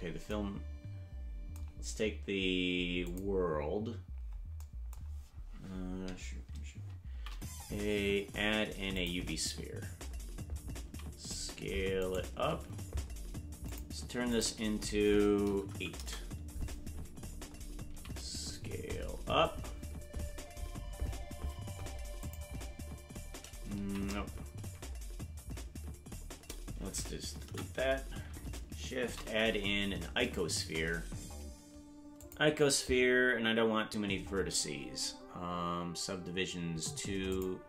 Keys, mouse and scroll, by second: 3.0 click, 5.2-6.5 scroll down 4, 7.0 shift+a, 10.8 s, 13.6 click, 14.2-17.0 drag, 17.8 s, 27.7 Delete, 28.9 shift+a, 37.3 click.